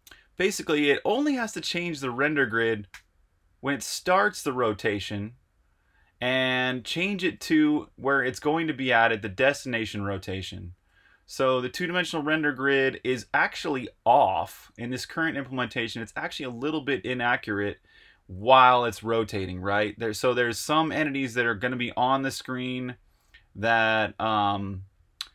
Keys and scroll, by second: 2.8 r, 7.4 e, 10.7 r, 15.6 e, 19.0 r, 21.5 e, 25.0 l.